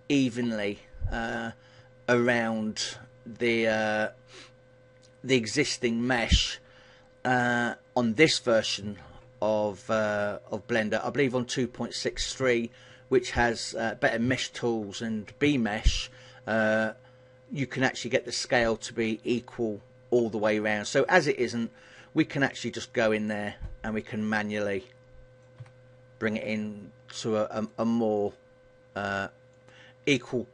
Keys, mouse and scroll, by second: 22.0 right click, 23.3 shift+right click, 24.3 click, 25.7 a, 26.5 right click, 28.5 right click.